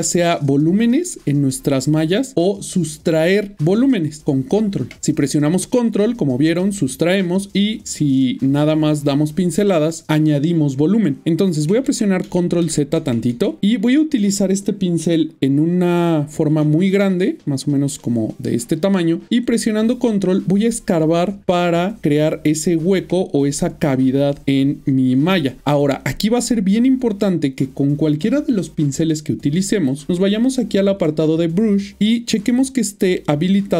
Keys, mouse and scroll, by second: 0.3 click, 0.7 double click, 2.1 middle click, 3.0 middle click, 3.5 ctrl+click, 5.5 middle click, 11.7-13.0 ctrl+z, 13.3 ctrl+z, 13.7 middle click, 17.7 click, 19.7 ctrl+click, 23.2 middle click, 26.0 ctrl+click, 26.0 middle click, 31.0 click.